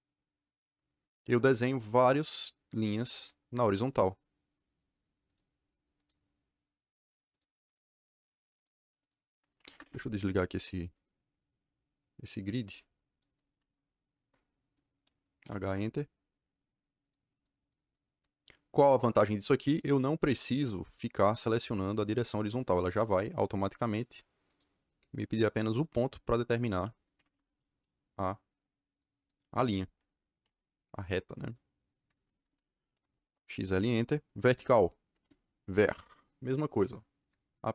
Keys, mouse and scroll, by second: 1.1 click, 2.2 click, 2.9 click, 3.8 click, 5.2 click, 5.9 click, 7.3 click, 8.5 click, 9.0 click, 9.5 Escape, 9.8 Escape, 10.9 click, 13.4 Escape, 13.6 Escape, 14.1 KP_Enter, 15.4 h, 15.6 KP_Enter, 17.0 click, 17.3 click, 17.5 click, 17.8 click, 19.6 click, 19.9 click, 21.8 click, 22.9 click, 23.7 click, 24.4 click, 25.7 click, 26.6 click, 27.1 Escape, 28.8 click, 29.1 click, 30.3 Delete, 32.3 Escape, 32.6-33.5 typing, 35.1 v, 35.7 KP_Enter, 36.7 click, 37.1 click, 37.4 click.